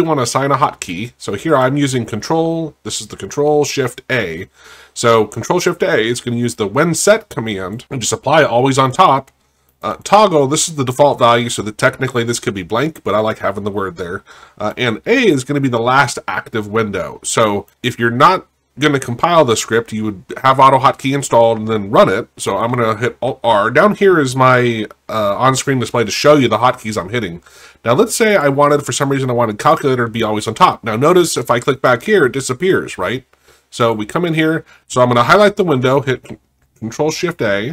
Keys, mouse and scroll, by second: 6.6 click, 9.9 click, 14.7 click, 17.7 click, 22.5 click, 23.3 alt+r, 28.3 alt+r, 28.3 click, 31.2 click.